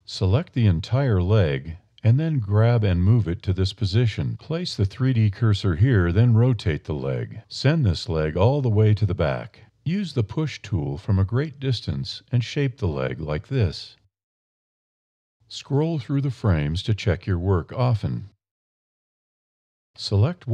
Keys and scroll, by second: 2.2 g, 5.0 r, 8.6 a, 10.0 e, 11.6 e.